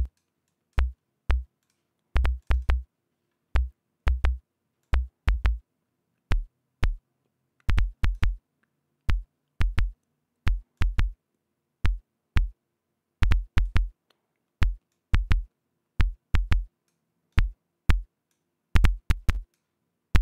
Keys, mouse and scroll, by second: 0.4 click, 1.0 click, 2.1-3.4 drag, 5.3-8.9 drag, 11.3-14.4 drag, 15.4-17.6 drag, 17.8-19.0 drag, 19.3-20.2 drag.